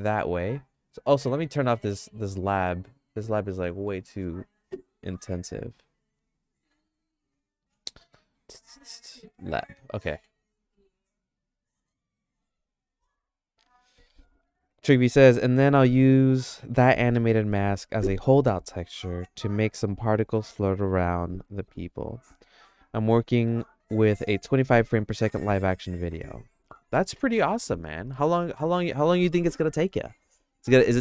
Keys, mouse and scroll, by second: 1.6 middle click, 1.9 shift+middle click, 3.6 middle click, 6.0 click, 9.4 click, 10.0 middle click.